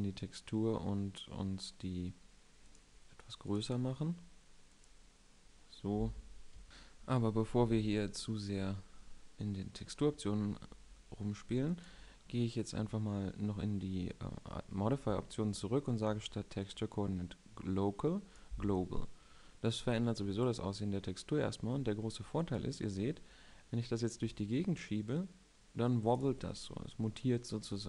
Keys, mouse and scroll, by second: 2.4-5.3 drag, 5.3 middle click, 5.4 click, 5.6 middle click, 5.7 drag, 6.2 s, 7.5 KP_7, 8.6 middle click, 19.0 middle click, 20.1-22.0 drag, 26.5-27.4 middle drag.